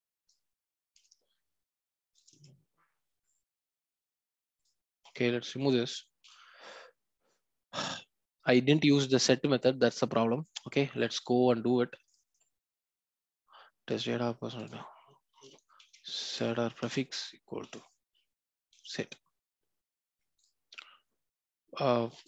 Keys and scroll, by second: 16.7 Return.